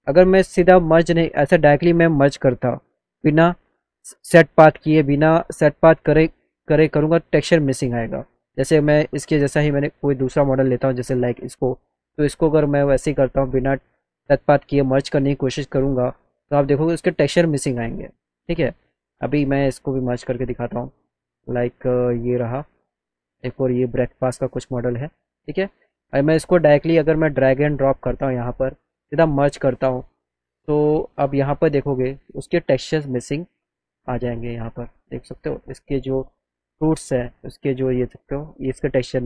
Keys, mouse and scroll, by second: 0.1 alt+middle click, 2.5 click, 3.3 click, 5.5 click, 6.6 click, 10.3 click, 11.4 click, 13.8 click, 16.0 click, 22.6 click, 22.9 click, 23.8 click, 24.0 click, 26.9 click, 27.7 click, 29.3 click, 33.8 click, 34.3 z.